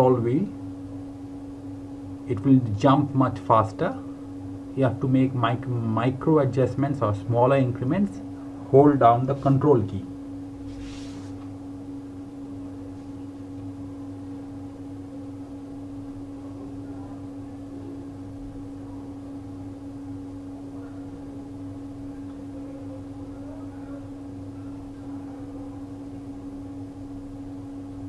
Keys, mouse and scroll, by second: 1.1 click, 5.2 click, 9.9 scroll down 1, 13.5 scroll up 1, 17.4 alt+Num_Lock, 17.7 alt+scroll down 2, 18.4 scroll down 1, 21.1 space, 21.6 space, 24.2-25.1 scroll down 1, 25.5-26.0 scroll down 1, 26.5-27.8 scroll down 1, 27.9 scroll up 1.